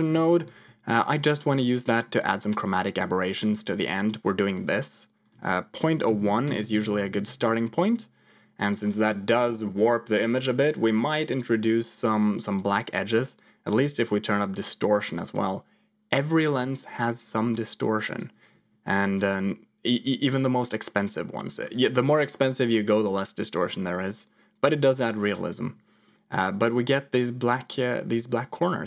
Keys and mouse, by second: 2.2 shift+click, 5.2-6.6 drag, 14.0-18.3 shift+drag.